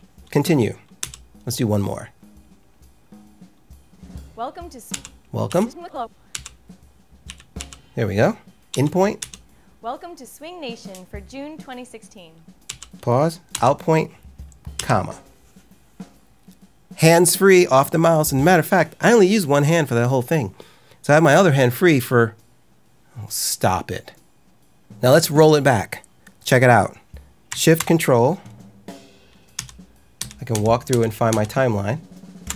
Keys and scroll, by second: 0.9 l, 4.8-7.5 typing, 8.6 i, 9.1 l, 12.6 k, 13.4 o, 14.7 ,, 29.5 ctrl+shift+..